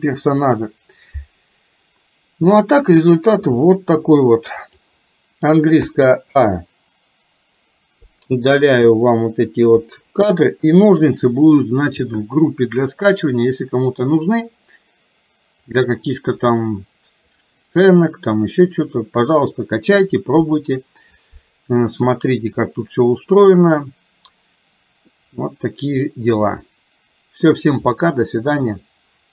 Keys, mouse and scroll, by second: 3.5-4.8 drag, 6.0 a, 8.1 click, 9.8 Delete, 15.7-17.3 drag, 22.6-25.2 middle drag, 26.5-27.5 middle drag.